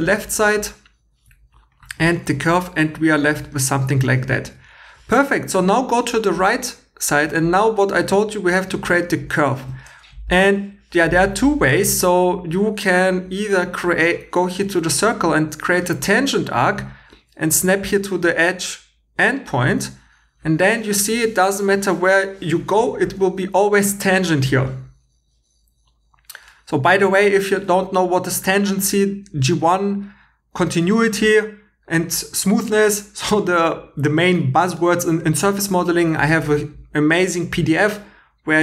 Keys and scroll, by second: 0.0 x, 1.4 2, 3.9-4.6 typing.